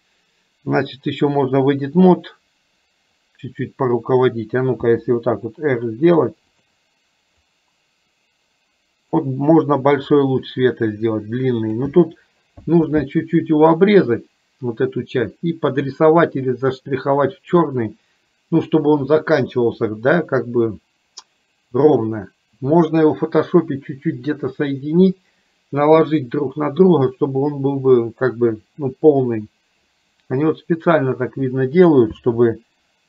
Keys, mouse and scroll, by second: 4.9 r, 7.6-9.2 drag, 10.2-11.8 drag, 32.6 s.